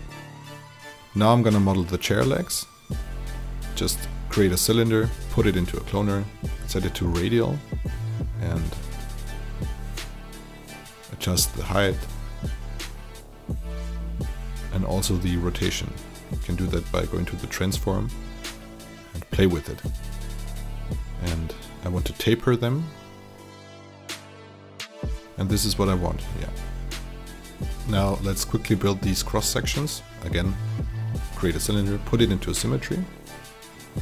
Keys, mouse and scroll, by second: 0.7 click, 1.3 alt+middle click, 1.4 alt+click, 1.8-3.1 drag, 3.2 alt+click, 3.5 alt+click, 4.4 click, 4.6 alt+click, 4.9 click, 7.0 alt+click, 7.1 middle click, 7.5 alt+middle click, 7.8 click, 8.3-10.0 typing, 8.5 click, 10.1 click, 10.8 middle click, 11.2 alt+right click, 11.5 click, 13.5 alt+middle click, 13.8 click, 14.4 alt+click, 15.1 click, 16.5 KP_0, 16.8 click, 17.4 alt+click, 18.0 alt+click, 18.3 click, 19.8 KP_4, 20.3 ctrl+z, 20.8 alt+click, 21.0 alt+right click, 21.1 alt+click, 21.5 click, 22.7 click, 24.0 r, 24.3 click, 25.3 click, 25.4 alt+click, 26.5 alt+right click, 26.7 alt+click, 26.9 alt+right click, 27.0 alt+middle click, 27.1 alt+click, 27.4 alt+middle click, 28.3-29.7 drag, 29.7 alt+click, 30.1 click, 31.4 click, 31.5 alt+click, 31.7 alt+e, 32.4 click, 33.1 alt+click, 33.5 click, 33.8 alt+right click.